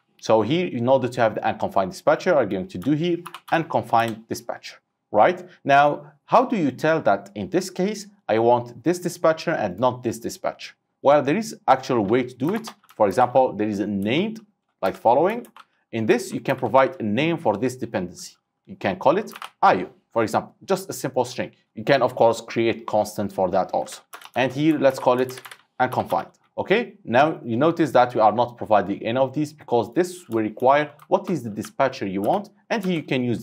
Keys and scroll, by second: 4.1 Return, 15.0 Return, 21.6 ctrl+c, 24.4 ctrl+v, 33.1 Return.